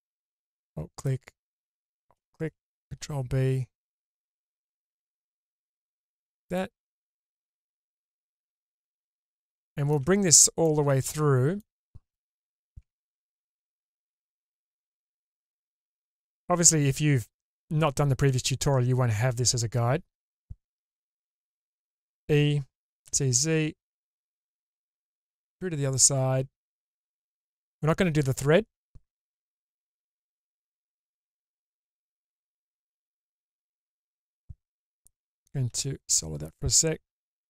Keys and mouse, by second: 0.0 alt+middle click, 0.5 middle click, 3.0 ctrl+b, 5.2-6.5 middle drag, 7.3 alt+middle click, 8.3-9.9 middle drag, 10.6 alt+middle click, 12.8 Tab, 13.8-15.1 drag, 20.9 Tab, 21.9 e, 29.9 middle click, 33.7 middle click, 35.7 /, 37.1 alt+z.